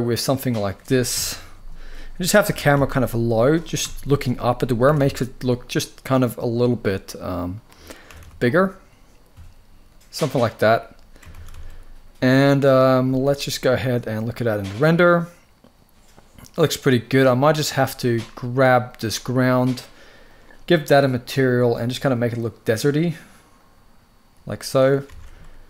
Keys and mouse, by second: 0.1 click, 0.8 KP_3, 2.2 g, 2.4 z, 3.1 click, 3.5 KP_0, 4.6 r, 4.7 r, 5.3 right drag, 6.5-7.3 drag, 7.8 r, 7.9 r, 10.1 shift+click, 11.1 ctrl+s, 11.3 ctrl+s, 12.7 z, 18.6 click, 19.9 click, 20.5 click, 21.4 click, 24.8 alt+a.